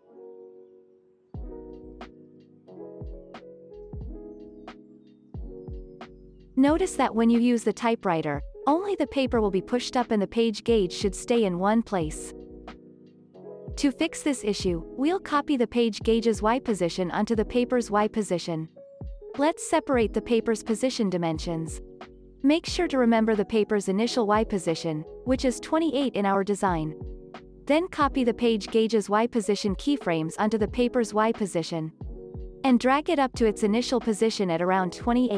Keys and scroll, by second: 12.6 space, 14.8 ctrl+s, 15.4 z, 17.1 ctrl+c, 29.9 ctrl+v.